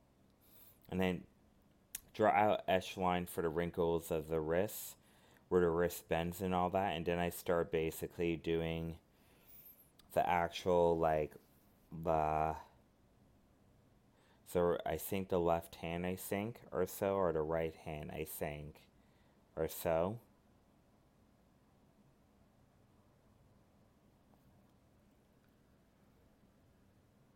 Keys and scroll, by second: 2.8 alt+space, 5.2 ctrl+z, 8.8 alt+space, 12.7 alt+space, 15.8 alt+space, 22.4 alt+space.